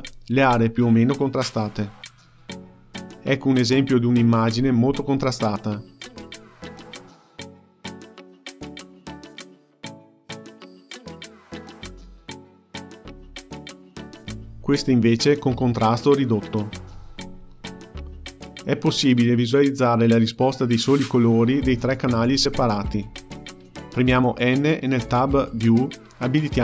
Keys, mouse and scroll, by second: 9.1-11.4 drag, 11.4-12.7 scroll down 5, 12.7-18.0 drag, 19.3 click, 25.4 n.